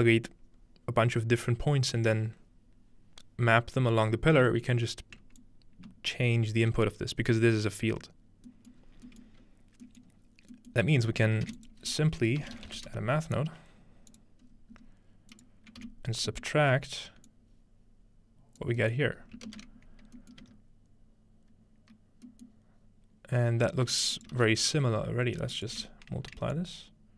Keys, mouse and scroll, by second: 5.4-6.7 drag, 8.7 middle click, 8.8 scroll down 2, 9.4-9.9 scroll up 2, 10.3 scroll down 2, 11.1 scroll up 1, 11.5-13.3 typing, 11.6 shift+click, 12.2-13.0 scroll up 1, 12.3 shift+click, 14.1-18.6 drag, 14.4-16.1 scroll up 1, 15.8 s, 16.1-17.6 scroll down 1, 16.5-17.3 middle drag, 19.2-21.0 scroll up 2, 20.4 middle click, 23.7-24.3 scroll up 2, 24.2-26.4 shift+drag, 24.4 shift+d, 25.8 m, 26.6-27.1 drag.